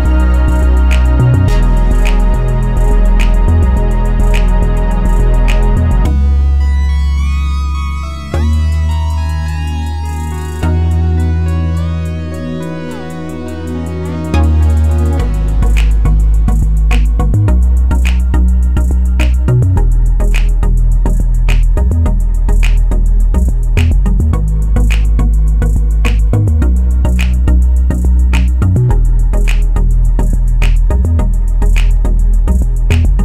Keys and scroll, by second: 31.0 8.